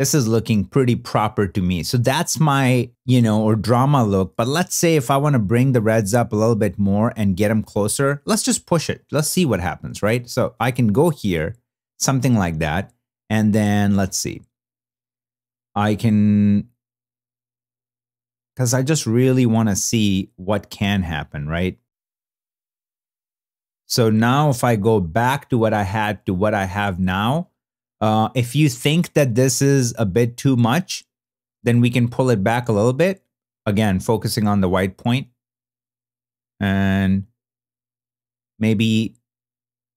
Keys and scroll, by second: 0.0 shift+z, 25.0 super+b, 25.6 super+n.